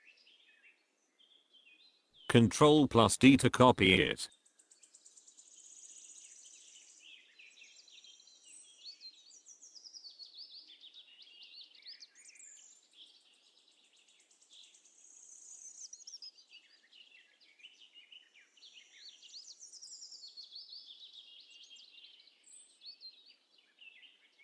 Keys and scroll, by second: 11.2 Delete, 17.0 KP_Subtract, 17.2 KP_1, 17.2 KP_3, 17.5 n, 20.2 ctrl+d, 23.0 Delete.